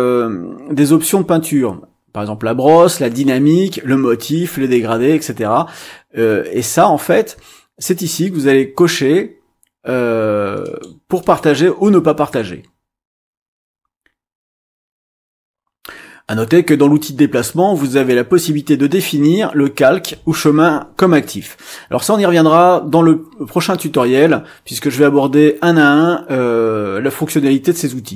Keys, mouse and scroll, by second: 10.6 click, 11.2 click.